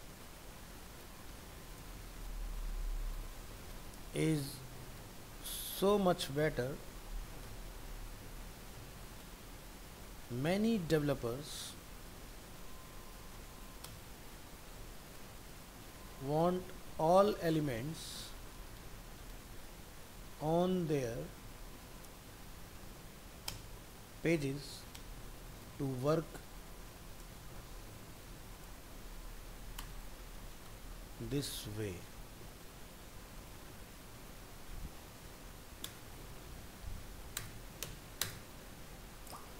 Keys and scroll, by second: 2.1 ctrl+v, 35.0 ctrl+s, 36.5 ctrl+z.